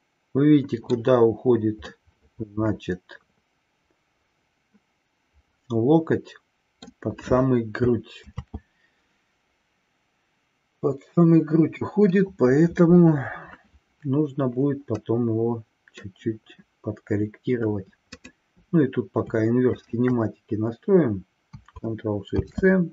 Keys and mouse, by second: 2.0-7.0 middle drag, 8.9 ctrl+z, 15.0-16.1 middle drag, 19.9 shift+click, 22.2 ctrl+shift+c.